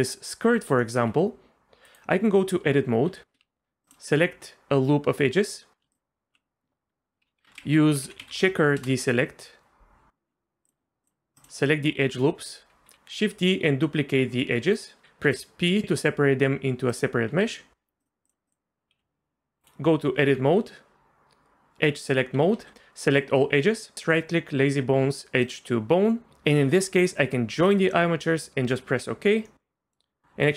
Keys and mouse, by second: 0.8 click, 1.1 g, 2.3 Tab, 3.1 2, 3.8 ctrl+alt+click, 7.4 F3, 10.6 click, 12.9 shift+d, 14.7 click, 15.2 p, 17.3 Tab, 19.0 g, 19.9 Tab, 22.5 a, 23.9-28.9 drag, 29.6 middle click.